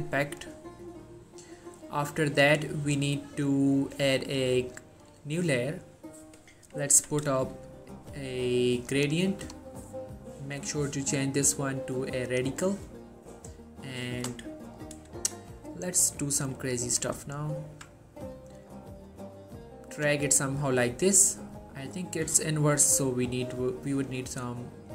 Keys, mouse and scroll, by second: 4.8 click, 7.1 b, 7.9-9.1 alt+scroll down 2, 9.1 click, 13.3-13.8 scroll down 2, 13.8-15.6 scroll up 2, 15.6 scroll up 1, 16.5-17.1 click, 17.6-18.1 alt+scroll down 1, 18.5-20.3 drag.